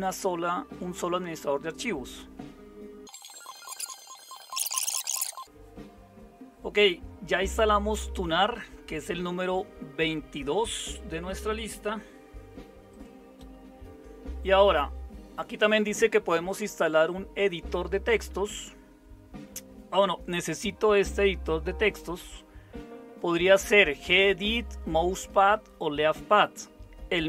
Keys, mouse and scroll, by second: 5.4 super+7.